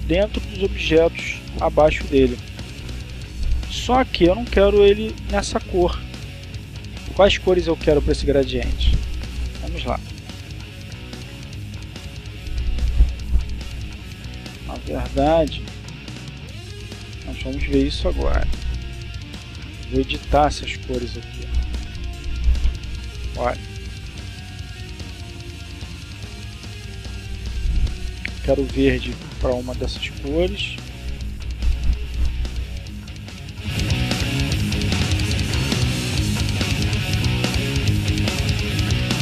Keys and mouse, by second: 7.4 click, 10.0-11.3 drag, 11.8-13.8 drag, 18.1 click, 19.6-21.8 drag, 22.8 click, 23.9 click, 25.7-26.7 drag, 29.5-30.9 drag, 32.4 click, 33.3-34.3 drag, 34.5 click.